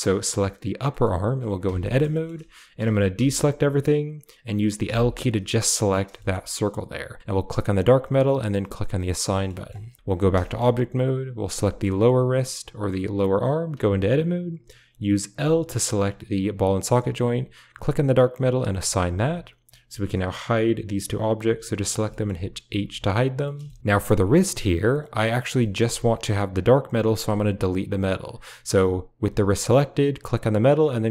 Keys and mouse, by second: 0.0 g, 0.9 shift+middle click, 1.5 Tab, 2.1 shift+middle click, 2.7 a, 3.1 a, 4.7 l, 6.2 click, 6.3 middle click, 7.4 drag, 8.3 click, 10.1 Tab, 10.4 shift+middle click, 11.3 click, 11.6 shift+middle click, 11.7 shift+click, 13.6 Tab, 15.3 l, 17.7-18.4 drag, 18.6 click, 18.9 Tab, 19.6 click, 21.3 h, 21.7 drag, 22.0 shift+click, 22.6 h, 23.8 a, 23.8 g, 25.6 shift+click, 27.8 click, 29.0 g, 30.0 click.